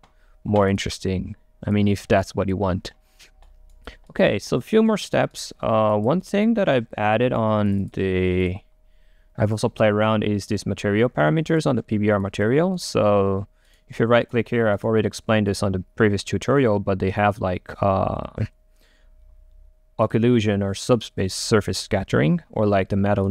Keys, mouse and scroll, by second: 0.7 click, 2.3 click, 3.5-6.1 right drag, 6.1 click, 6.3 right click, 7.2 scroll up 2, 7.3 right click, 7.8-10.9 drag, 10.9 middle click, 11.6-12.8 drag, 12.8-15.6 right drag, 15.6 click, 16.5-18.7 scroll up 2, 18.7 scroll up 1, 20.2-23.3 drag.